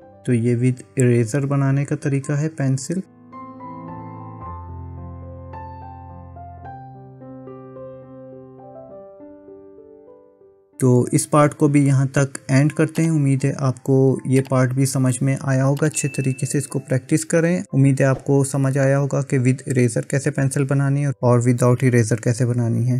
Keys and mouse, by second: 10.2 middle click, 11.0 KP_1.